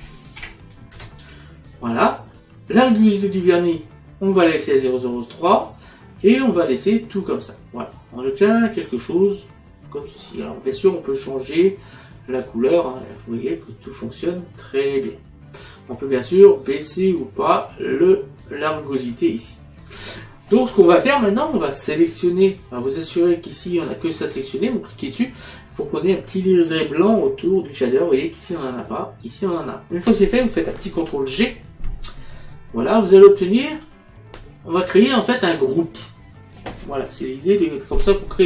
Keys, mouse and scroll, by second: 0.4 KP_1, 1.0 Return, 1.0 KP_Enter, 6.8 middle click, 11.6 click, 16.8 click, 22.4 click, 23.9 click, 31.3 ctrl+g, 32.6 middle click, 33.9 click, 35.2 click.